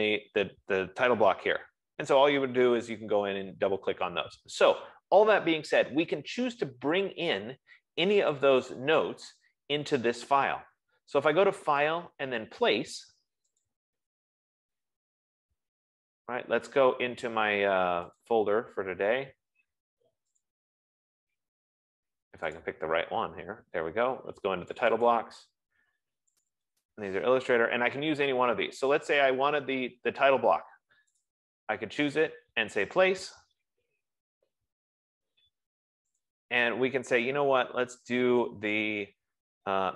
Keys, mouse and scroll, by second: 8.9 click, 12.3 click, 13.9 click, 18.9 click, 20.9 click, 23.0 click, 25.2 click, 25.8 click, 27.0 click, 27.2 click, 31.6 click, 32.2 F15, 33.4 click, 36.6 click.